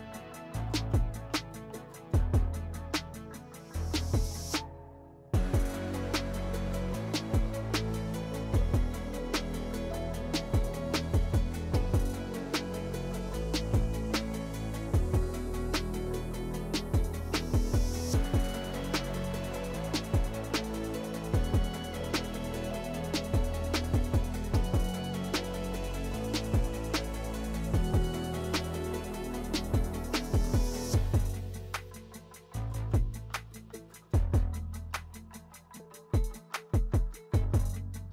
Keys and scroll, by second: 10.0 s, 13.8 s, 15.3 2, 16.8 s, 19.2 s, 20.9 s, 31.7 s, 34.2 s.